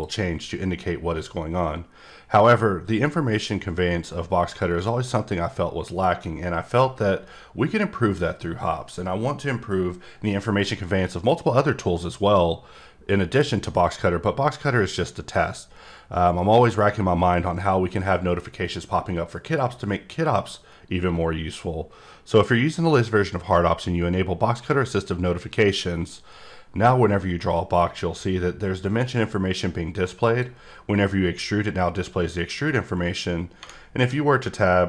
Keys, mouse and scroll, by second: 2.3 right click, 13.8 click, 14.9 click, 17.4 click, 27.1 click, 27.2-27.9 typing.